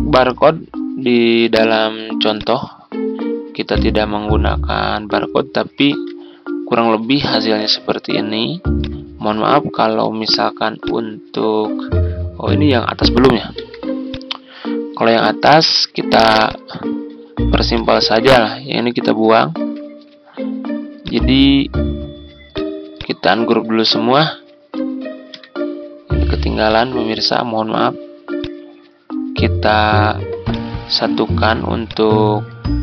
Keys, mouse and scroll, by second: 5.9 ctrl+g, 7.1 click, 8.7 click, 13.5 z, 14.0-15.6 drag, 19.7 Delete, 21.0 click, 24.7 ctrl+u, 25.2 ctrl+u, 26.1 ctrl+u, 26.6-31.6 drag.